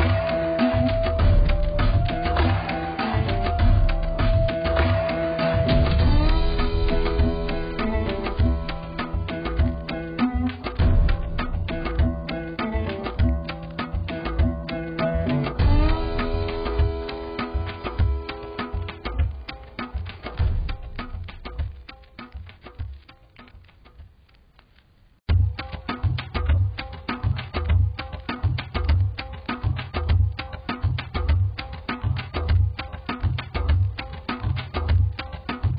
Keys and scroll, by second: 10.6 ctrl+alt+shift+e, 20.2 z.